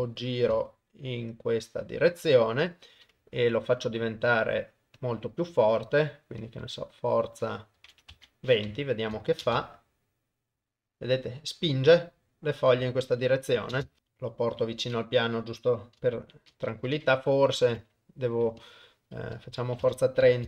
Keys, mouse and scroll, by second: 2.4 middle click, 5.0 click, 6.4-8.2 drag, 9.4 shift+space, 13.8 shift+space, 14.0 g, 16.2 shift+Left, 17.5-19.9 drag.